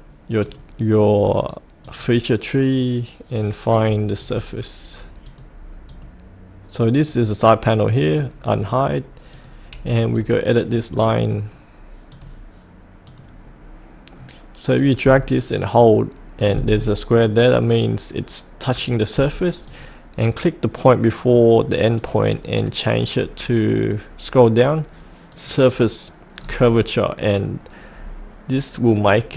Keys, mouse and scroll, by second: 7.0 right click, 8.0-16.4 drag, 16.7-19.6 scroll down 1, 19.6 click, 23.1-25.3 scroll down 1, 25.3 click, 26.3-27.7 scroll up 1.